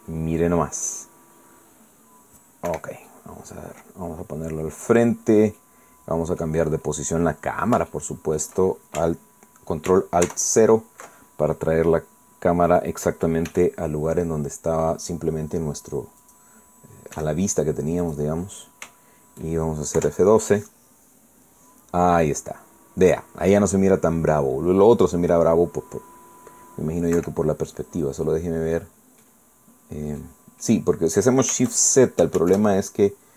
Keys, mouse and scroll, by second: 3.7 Escape, 4.1-5.9 middle drag, 6.6-7.8 drag, 8.9 shift+click, 11.2 ctrl+alt+KP_0, 13.7 right click, 14.5 g, 14.5 middle click, 17.2 click, 18.1 g, 19.0 click, 21.0 F12, 28.2 Escape, 29.3-30.4 drag, 30.5-31.2 scroll up 3, 31.2 middle click, 31.8-32.3 scroll down 1, 32.9 shift+scroll up 1, 33.0 shift+middle click.